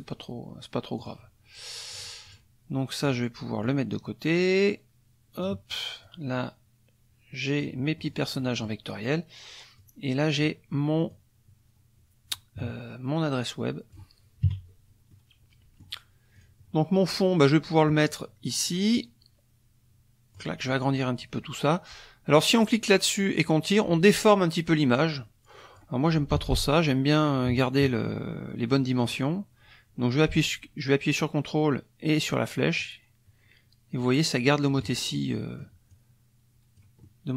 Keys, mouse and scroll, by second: 1.0 click, 1.9 click, 2.3 click, 3.0 click, 3.6-5.6 drag, 6.0-7.8 drag, 8.0 click, 8.4 click, 9.8-10.6 drag, 11.1-14.1 drag, 14.4 KP_Subtract, 15.1 middle click, 16.3 click, 17.9-20.6 drag, 22.6-25.9 drag, 26.3 ctrl+z, 32.8-35.0 ctrl+drag, 35.1 ctrl+click, 35.9 click.